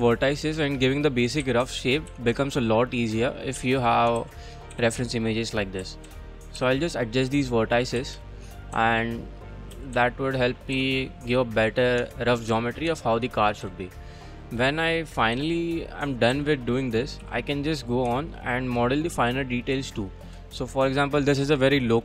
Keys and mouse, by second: 0.0-2.1 typing, 0.4 click, 1.2 click, 1.9 click, 2.7 click, 3.6 a, 4.2 ctrl+r, 4.7 g, 5.1 click, 5.8 a, 6.0 c, 6.4 click, 6.6 g, 7.5 click, 8.0-10.8 typing, 8.6 click, 9.5 click, 10.6 click, 11.0 click, 11.6 click, 12.0 Tab, 12.5 a, 12.9 Tab, 13.6 c, 14.0 click, 15.4 e, 16.1 click, 16.3 s, 17.0 click, 17.2 g, 17.8 click, 18.1 Tab, 20.0 shift+click, 20.1 shift+middle drag, 20.2 shift+click, 20.7 shift+middle click.